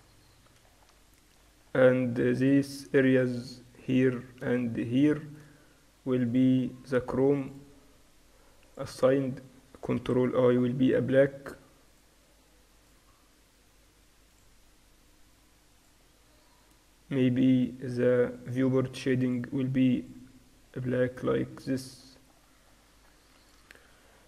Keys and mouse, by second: 0.0-1.2 drag, 1.2 middle click, 1.5 Tab, 1.5-3.1 right drag, 3.2 click, 3.9-4.9 middle drag, 7.0-11.2 drag, 10.1 ctrl+i, 12.0-15.1 drag, 15.8-21.0 drag, 21.0 middle click, 21.5 Tab, 23.4 ctrl+s.